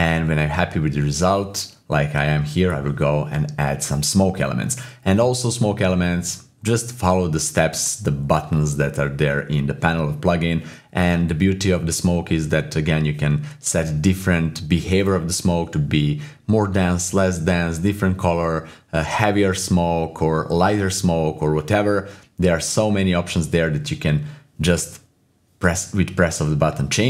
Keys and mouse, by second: 3.4 click, 25.4 shift+click, 25.9 click, 26.8 click.